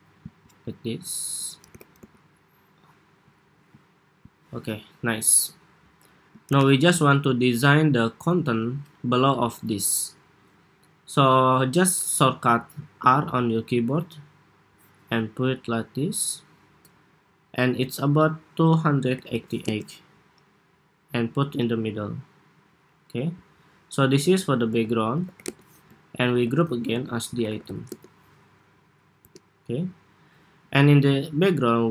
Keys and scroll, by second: 3.2 super+s, 6.2 super+=, 23.9 super+g, 24.5 super+r, 26.1 super+g, 26.7 super+r.